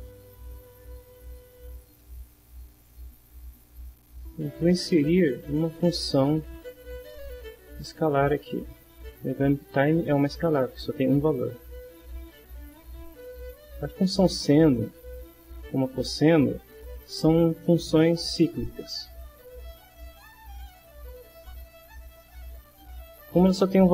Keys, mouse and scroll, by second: 2.0 middle click, 3.8 right click, 8.3 click, 11.3-13.2 drag, 15.1 click, 16.7 click, 19.2-20.7 drag.